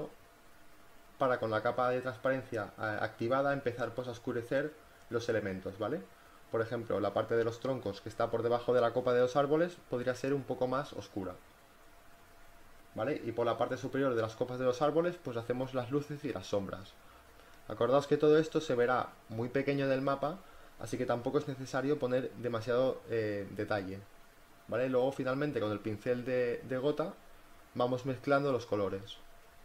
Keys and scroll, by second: 2.1 ], 12.2 space, 12.7 ctrl+z, 13.0 space, 13.1 [, 21.9 space, 22.2 ], 23.4-24.6 typing.